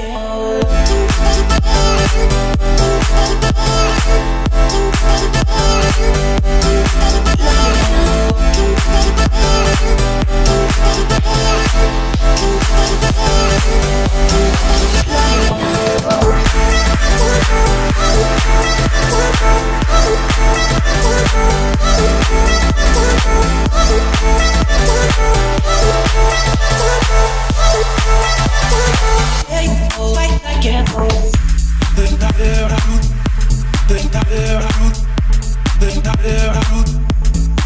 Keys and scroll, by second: 14.1 Escape.